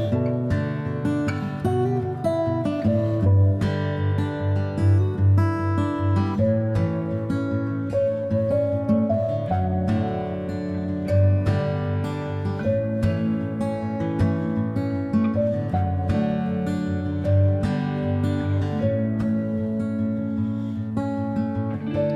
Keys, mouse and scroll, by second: 0.0 g, 1.7 click, 5.3 e, 7.7-9.4 right drag, 8.3 g, 11.0 g, 16.0-17.4 shift+middle drag, 17.4 click, 17.4-22.1 middle drag, 17.9 r, 19.4 e, 21.6 ctrl+z.